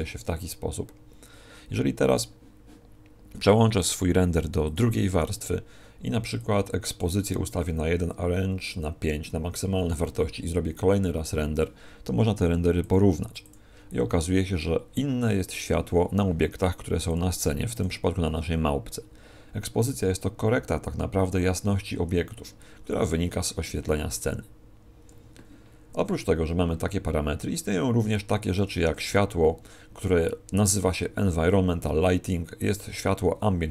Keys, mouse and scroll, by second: 25.1 Escape.